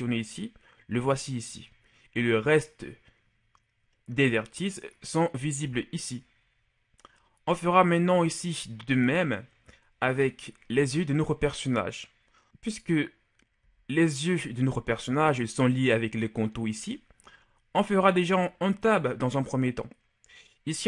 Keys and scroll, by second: 10.4 KP_Divide, 13.9 g, 19.3 Tab.